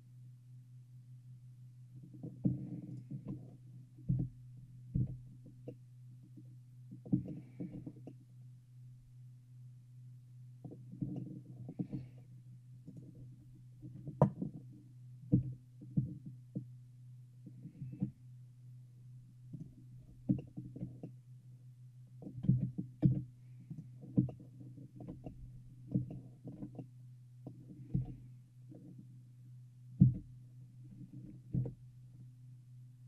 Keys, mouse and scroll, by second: 3.0-4.8 shift+right drag, 4.3 f, 5.1 f, 5.8-10.0 middle drag, 11.3-13.1 shift+middle drag, 13.1-14.8 shift+right drag, 15.5 e, 20.1-23.2 shift+middle drag, 22.6 shift+z, 23.2 shift+z, 24.4-27.1 middle drag, 28.1 shift+g.